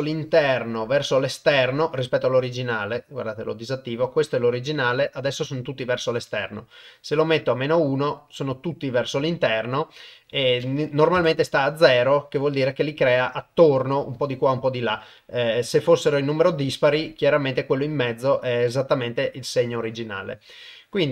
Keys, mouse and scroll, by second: 6.0-6.9 drag, 10.5 click, 19.9-21.1 shift+drag.